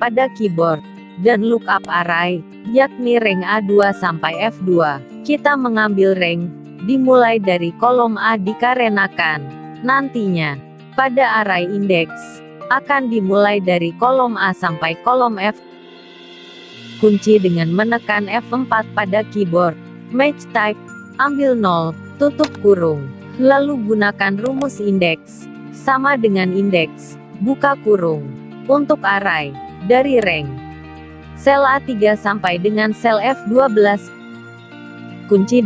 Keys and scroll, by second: 17.1 F4, 34.8 F4.